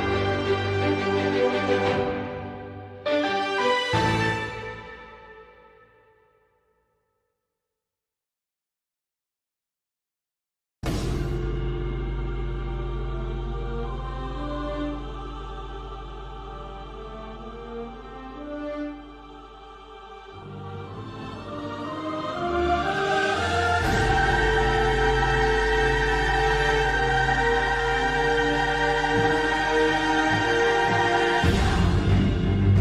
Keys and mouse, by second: 2.4 KP_7, 4.1 g, 7.8 shift+middle click, 8.3 middle click, 9.1 middle click, 11.3 middle click, 12.8 shift+middle click, 14.1 click, 16.5 KP_3, 18.8 shift+middle click, 20.9 g, 26.4 shift+middle click, 30.5 g.